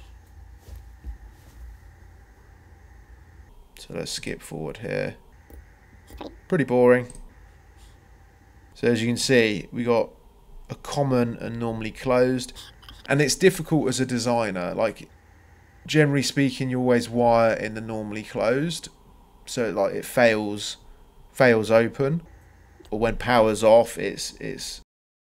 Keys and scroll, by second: 3.4 ctrl+c, 3.6 ctrl+v, 6.1 Escape, 7.0 Escape, 8.4 Escape, 11.4 c, 13.6 c, 15.3 c, 24.7 Escape.